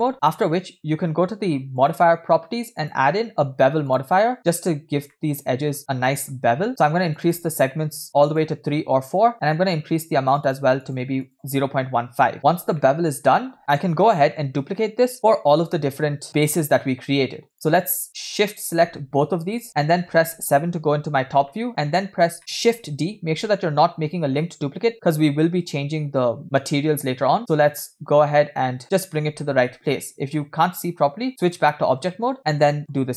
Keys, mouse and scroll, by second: 2.8-5.1 drag, 5.1-7.1 middle drag, 5.8 scroll up 2, 7.2 click, 8.3-10.6 drag, 10.9-12.3 drag, 13.0-14.7 middle drag, 13.6 scroll down 1, 14.8-15.2 shift+middle drag, 20.2 KP_7, 21.0 scroll down 2, 21.7 shift+middle click, 22.0 scroll down 2, 22.4 shift+middle click, 23.2 shift+d, 29.9-30.4 shift+middle drag, 31.6 click, 32.1-32.4 shift+middle drag, 32.8 shift+middle click.